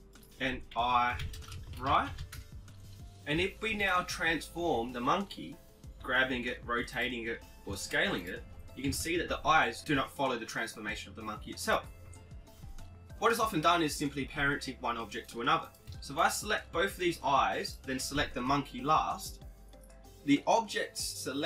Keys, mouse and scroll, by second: 0.1-2.1 drag, 3.1-4.9 right drag, 3.9 g, 6.3 KP_7, 7.2 r, 9.0 s, 10.2 KP_1, 13.7 right click, 14.7-17.3 right drag, 18.1 ctrl+p.